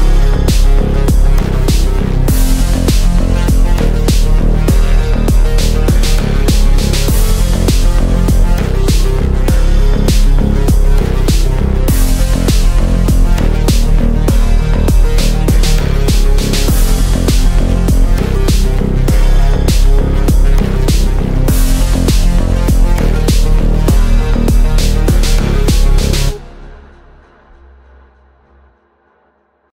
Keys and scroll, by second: 4.1 KP_Add, 8.0 l, 17.4 c, 17.6 e, 25.9 ctrl+r.